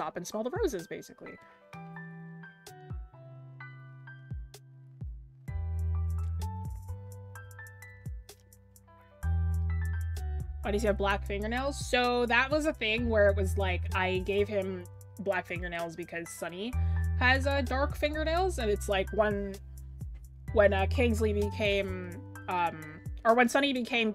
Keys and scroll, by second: 6.3-6.9 scroll down 1, 11.6 scroll down 1, 13.1-13.7 scroll up 1, 13.7 scroll, 17.3 scroll up 1, 17.9 scroll, 21.6 scroll, 22.1 scroll up 1.